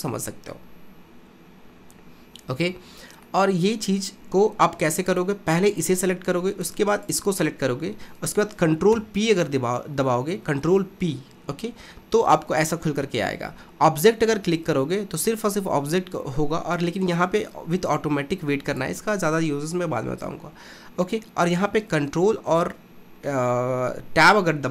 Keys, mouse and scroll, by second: 3.4-5.1 middle drag, 5.1 click, 5.7 click, 7.0 shift+click, 9.0 ctrl+p, 21.6 ctrl+Tab.